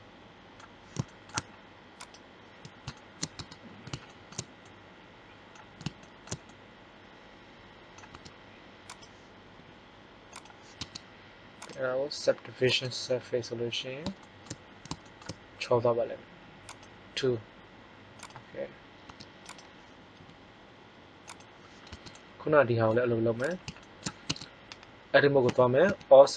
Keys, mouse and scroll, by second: 1.9-3.5 right drag, 3.3 Tab, 8.1 Tab, 9.5 g, 10.7 Tab, 16.6-18.9 drag, 19.0 Tab, 20.0 g, 21.8 Tab, 24.2 Tab, 25.4 a, 25.7 a.